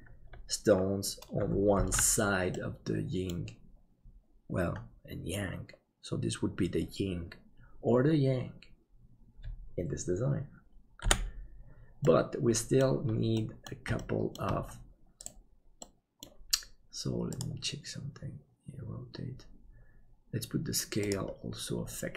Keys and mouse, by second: 2.0 ctrl+s, 2.5 middle click, 11.0 KP_7, 12.0 middle click, 13.3 middle click, 14.0 shift+middle click, 15.8 middle click.